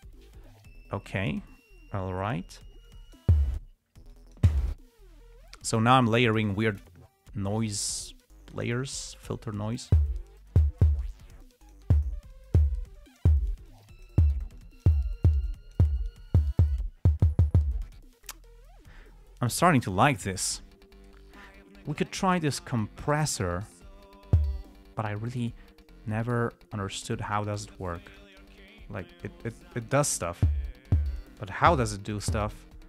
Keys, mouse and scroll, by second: 3.2-3.7 drag, 4.4-4.9 drag, 8.4-9.5 drag, 9.6-10.3 drag, 11.8 click, 12.7-13.1 drag, 13.3-13.7 drag, 14.0-14.6 drag, 14.9 click, 15.8-16.3 drag, 23.9 click, 26.2-27.9 drag, 28.2-30.4 drag, 31.4-32.7 drag.